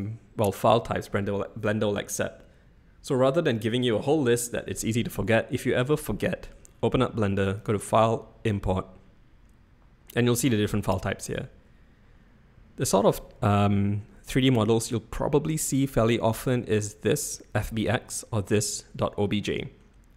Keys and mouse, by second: 7.7-19.6 drag.